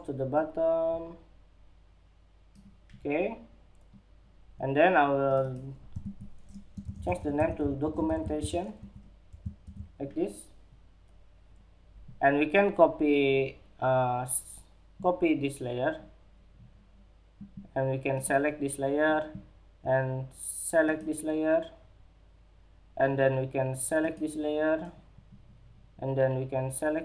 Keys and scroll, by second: 5.3 super+a, 8.1 Escape, 8.9 super+-.